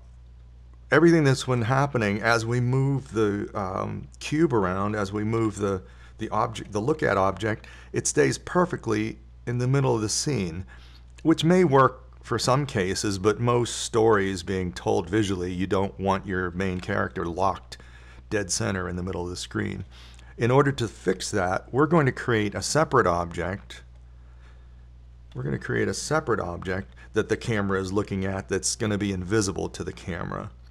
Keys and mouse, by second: 4.9 KP_7, 6.7 KP_1, 8.6 g, 28.1 KP_7.